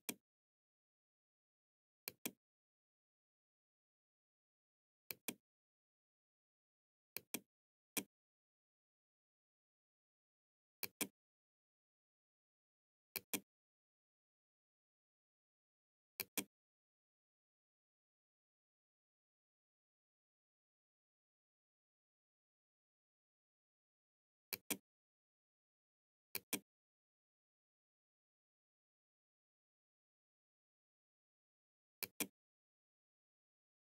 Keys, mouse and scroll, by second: 1.1 click, 3.9-5.1 right drag, 6.1 right click, 6.4 click, 9.9 click, 12.2 click, 15.1 click, 23.6 click, 25.0-26.1 drag, 31.1 click, 32.8 click.